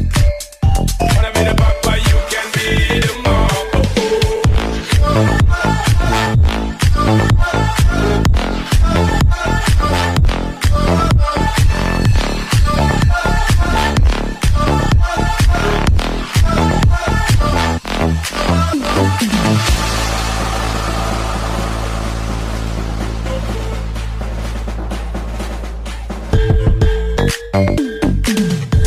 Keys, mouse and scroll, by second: 5.1 double click, 10.0-10.5 scroll up 1, 10.7 ctrl+alt+shift+e, 12.1 ctrl+j, 13.7 alt+click, 14.4 alt+click, 19.7 double click, 22.0 shift+BackSpace, 22.9 Return, 24.0 ctrl+d, 25.3 alt+right click, 26.1 alt+click.